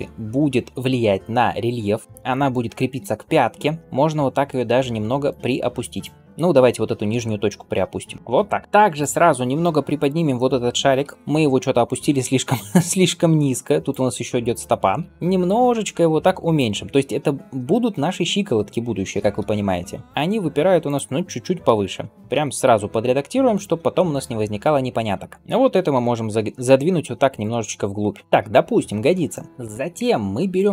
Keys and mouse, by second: 2.9 g, 5.6-8.2 drag, 6.6 g, 8.2-9.4 middle drag, 9.4 Tab, 9.8 click, 10.9 l, 11.1 g, 15.2-30.4 middle drag, 15.2 s, 18.9 g, 22.2 g, 25.5 g, 28.2 Tab, 29.8 Tab, 30.4 click, 30.5-30.7 middle drag.